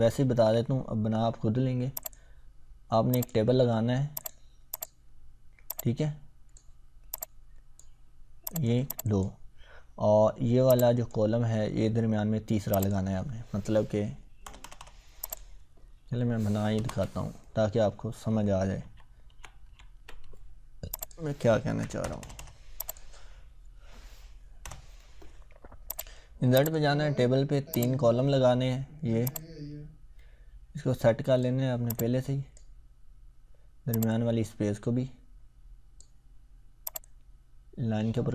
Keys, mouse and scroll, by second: 2.0-6.6 drag, 13.2-13.7 scroll up 1, 14.4 Return, 15.3 click, 16.8 ctrl+Return, 18.8 ctrl+z, 21.0 click, 21.8 BackSpace, 22.0 Return, 22.9 click, 24.6 Return, 25.9-31.5 drag.